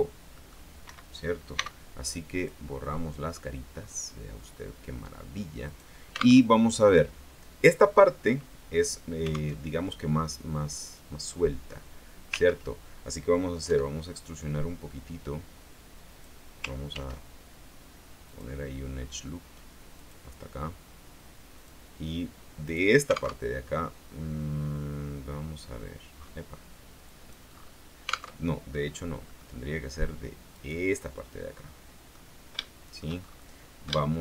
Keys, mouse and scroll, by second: 0.5 middle click, 1.0 Escape, 1.7 x, 2.5 click, 3.3-3.7 scroll down 2, 3.9-4.5 scroll up 1, 4.9 scroll up 1, 5.8 right click, 6.5 alt+Tab, 9.7 alt+Tab, 11.1-12.8 drag, 12.7 ctrl+z, 13.8 e, 16.3 click, 17.1 ctrl+r, 18.4 click, 20.1 click, 21.7 click, 22.8 right click, 23.5 alt+Tab, 25.1-25.5 scroll down 2, 26.3 scroll up 2, 27.2 click, 27.7-28.1 scroll up 2, 28.5 alt+Tab, 28.9-29.4 alt+scroll down 3, 29.4 middle click, 30.7 right click, 31.7 middle click, 32.7 shift+middle click, 34.1 shift+middle click.